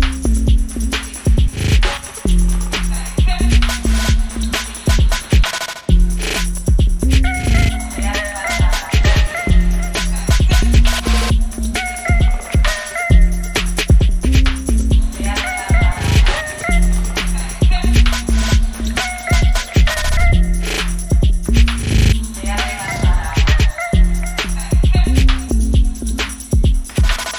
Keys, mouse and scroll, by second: 6.9 click, 8.1-10.3 drag, 10.3 space, 12.4 click, 13.8-18.5 drag, 18.5 ctrl+d, 19.0 click, 20.2 p, 21.5-23.7 drag, 24.8 click, 25.3-26.4 typing, 26.8-27.3 drag.